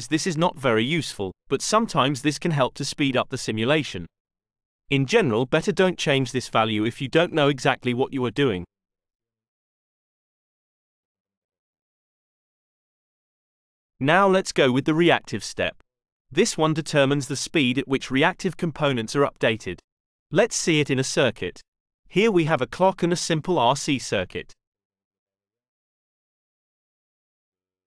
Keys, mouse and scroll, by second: 4.7 click, 14.3 click, 15.4 click, 17.2 click, 19.1 click, 20.1 click, 21.7-24.1 drag, 25.9-27.7 middle drag.